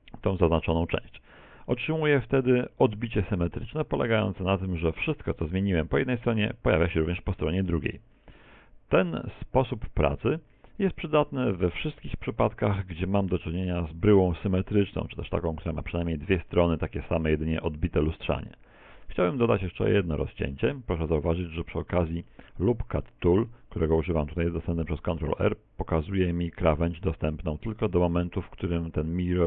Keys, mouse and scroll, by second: 1.7 middle click, 2.2 z, 2.5 middle click, 8.3 middle click, 9.6 middle click, 12.7 shift+middle click, 19.5 ctrl+r, 21.7-22.3 scroll up 1, 22.3 middle click, 22.3-23.1 scroll up 3, 23.1 shift+middle click, 24.4 ctrl+r.